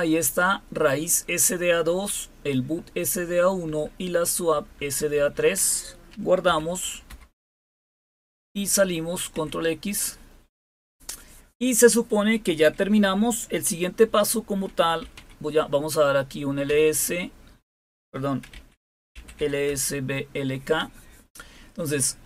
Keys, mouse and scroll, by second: 1.8 Down, 1.8 typing, 3.6 Down, 4.5 Down, 4.7 Down, 4.9 Down, 5.1 Down, 5.3 Down, 6.4 ctrl+o, 7.1 Return, 9.4 ctrl+x, 14.6-15.6 typing, 16.6 Return, 18.4-19.8 typing.